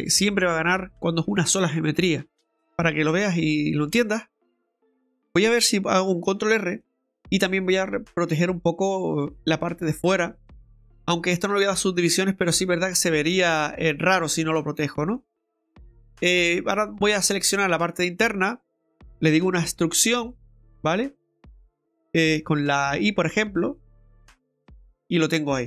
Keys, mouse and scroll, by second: 2.6 middle click, 2.6-3.5 scroll down 1, 5.1 right click, 5.2 Tab, 6.3 ctrl+r, 10.9-11.4 scroll up 2, 11.9 scroll down 1, 12.5 middle click, 14.8 middle click, 16.2 right click, 16.7 alt+shift+right click, 19.4 e, 25.1 scroll down 2, 25.3 middle click.